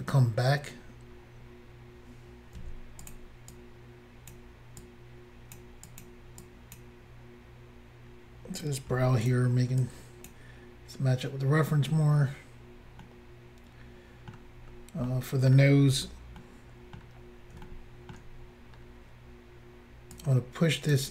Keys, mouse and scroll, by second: 0.6-1.9 scroll up 3, 2.7 f, 3.1 click, 3.1 click, 3.5 click, 4.9 click, 5.9 click, 6.1 click, 6.5 click, 8.9 f, 9.3 click, 9.9 click, 11.8 scroll down 1, 13.1 middle click, 14.7-15.2 scroll down 1, 15.2 middle click, 16.1 scroll down 1, 16.5 middle click, 17.7 shift+middle click, 18.5-19.0 scroll up 3, 20.2 click.